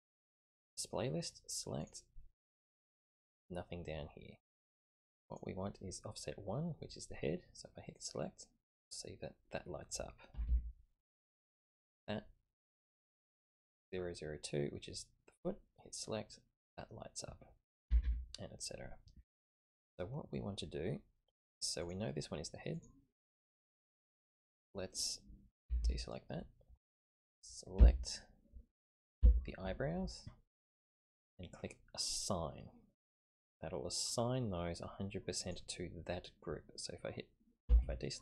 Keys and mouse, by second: 0.4 click, 1.8 click, 4.9 typing, 5.2 click, 7.9 click, 10.3 a, 10.5 a, 11.7 click, 15.9 click, 17.9 a, 18.0 a, 21.8 click, 22.7 click, 25.6 a, 25.8 a, 27.8 l, 29.2 l, 35.4 click, 37.7 a, 37.8 a.